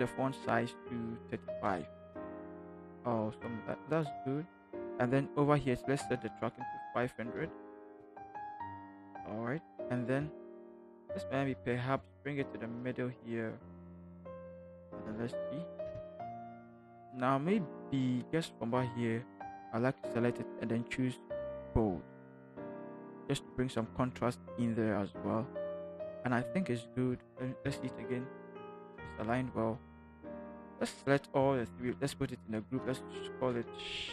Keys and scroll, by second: 1.4-1.9 typing, 7.2-7.9 typing, 10.5 ctrl+t, 14.9 shift+Up, 15.8 shift+Return, 27.9 ctrl+t, 28.9 ctrl+Return, 31.7 ctrl+shift+g, 33.3-34.1 typing.